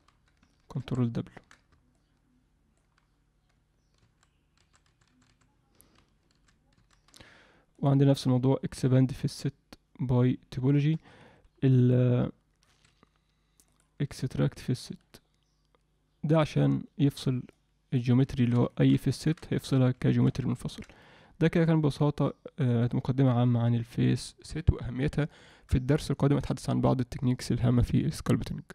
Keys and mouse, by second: 0.8 ctrl+w, 1.9 alt+middle click, 4.0 ctrl+w, 6.4 ctrl+alt+w, 7.8-11.1 drag, 11.8-12.9 drag, 13.7-17.2 drag, 17.5 alt+middle click, 18.3 ctrl+alt+middle click, 18.7 alt+shift+middle click, 19.2 ctrl+middle click, 19.5 alt+middle click, 20.0 shift+middle click, 20.5 ctrl+alt+middle click, 21.0-25.5 middle drag.